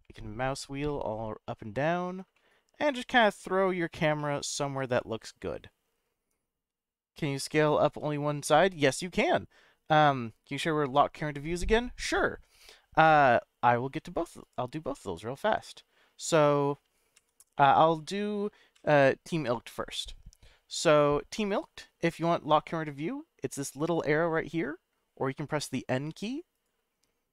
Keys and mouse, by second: 0.9-2.1 middle drag, 2.3-3.1 shift+middle drag, 3.4-3.9 middle drag, 4.2-4.8 shift+middle drag, 4.9-5.5 middle drag, 7.4-7.9 shift+middle drag, 14.4 click, 14.9-16.1 middle drag, 17.1 m, 18.2 middle click, 18.8 n, 19.7-22.2 middle drag, 25.6 n, 26.1 n, 26.5 click.